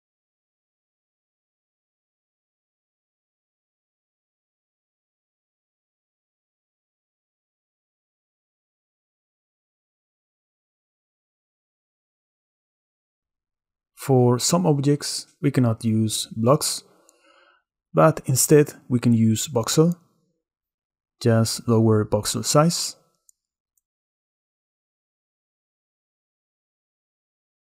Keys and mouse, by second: 0.0-0.7 middle drag, 1.1 middle click, 2.0-3.2 middle drag, 4.2 shift+click, 4.9-7.4 shift+drag, 7.4-8.7 shift+middle drag, 8.7 shift+click, 9.0-10.3 shift+middle drag, 10.7 middle drag, 11.0-12.2 middle drag, 12.2 click, 12.3-13.2 middle drag, 14.7 click, 16.8 middle click, 17.4 shift+middle click, 19.3 click, 20.3 shift+click, 21.0 shift+middle click, 21.8 shift+click, 21.9 shift+middle click, 22.0 shift+click, 24.0-25.4 shift+drag, 25.4-27.7 shift+middle drag.